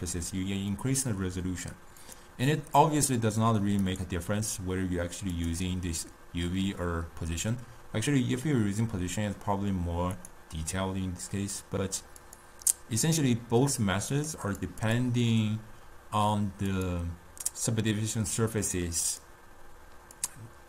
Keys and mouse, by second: 5.7-8.7 drag, 12.3-20.1 drag, 20.3-20.6 drag.